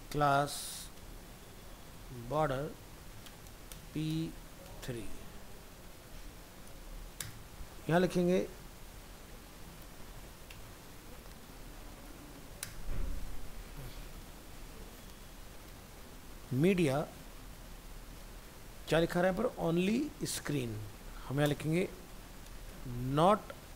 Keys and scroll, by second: 21.5 ctrl+Left.